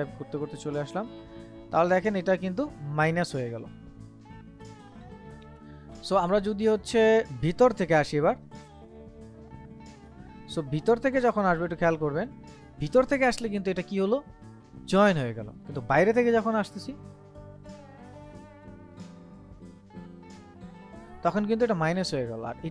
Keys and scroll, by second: 4.6 ctrl+z, 10.8 ctrl+z, 15.5 ctrl+z, 18.8 ctrl+z.